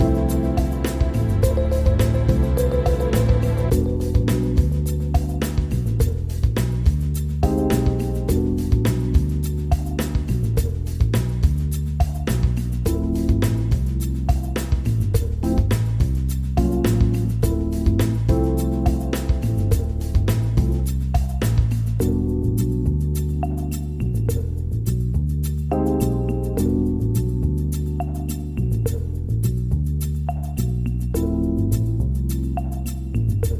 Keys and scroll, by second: 0.9 ctrl+g, 2.7 ctrl+z, 6.1 ctrl+r, 14.3 ctrl+g.